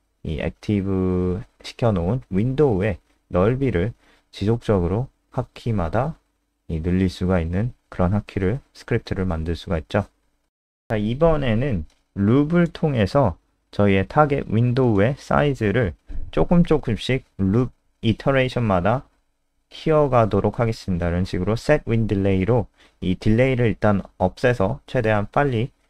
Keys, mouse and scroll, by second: 3.0 click, 5.7-6.7 scroll down 1, 6.9 click, 7.6-8.1 scroll down 1, 9.1-10.2 scroll down 1, 10.2 click, 10.4-11.8 scroll up 2, 10.9 click, 11.9 Up, 12.4 End, 12.9 Down, 13.1 ctrl+shift+Home, 13.9 BackSpace, 14.1 Return, 16.5-21.2 typing, 22.8-24.5 typing, 24.6 Return, 25.7-25.8 typing.